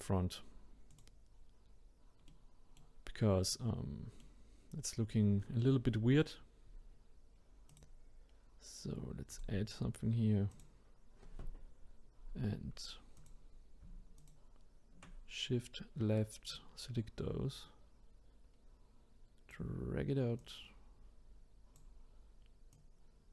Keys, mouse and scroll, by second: 0.9 click, 2.3-7.7 middle drag, 7.7-13.2 drag, 14.2 shift+click, 16.5 click, 20.4 click, 22.7 click.